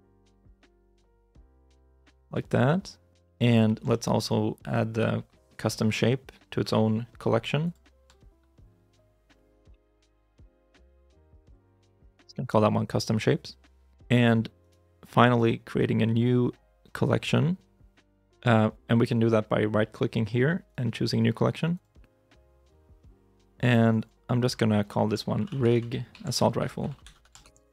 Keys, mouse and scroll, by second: 3.5 middle click, 3.7 shift+middle click, 4.7 right click, 6.5 m, 9.5-11.0 typing, 11.3 Return, 14.4 right click, 18.0 right click, 20.5 right click, 23.8 double click, 25.2-27.7 typing.